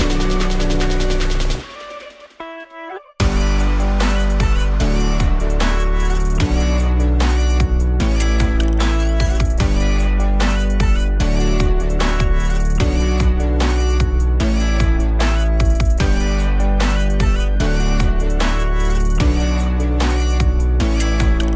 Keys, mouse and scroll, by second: 0.1 middle click, 0.8-1.9 alt+middle drag, 1.7 click, 19.1 click, 21.2 click.